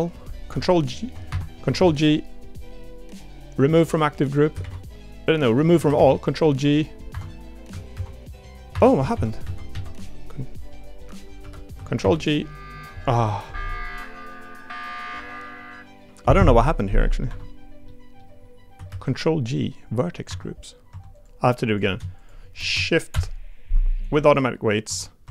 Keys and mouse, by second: 0.7 ctrl+h, 1.8 ctrl+g, 4.6 ctrl+g, 7.9 ctrl+g, 9.1 ctrl+z, 9.4 ctrl+z, 11.4 l, 12.0 ctrl+g, 17.2 Escape, 17.9 middle click, 18.9 ctrl+g, 20.9 Tab, 21.1 click, 21.7 click, 22.2 shift+click, 23.1 ctrl+p, 24.8 Tab, 25.2 Tab.